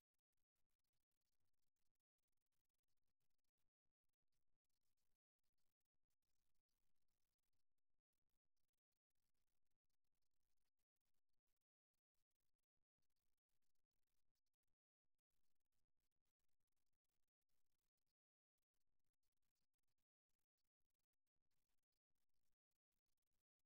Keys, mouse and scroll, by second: 2.5-5.8 drag, 9.0-11.0 middle drag, 12.0 middle click, 15.8 Tab, 17.8 a, 19.2-21.0 drag, 21.2 click, 22.0 middle click.